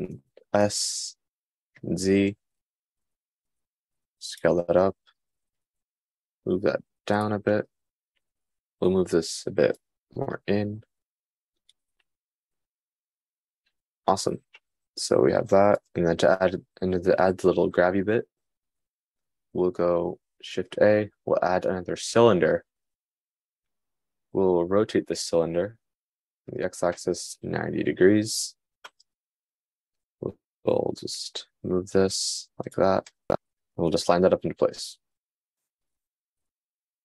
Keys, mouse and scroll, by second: 1.2 d, 1.5 s, 5.5 g, 9.6 g, 21.2 shift+a, 26.0 r, 31.3 g, 34.9 g.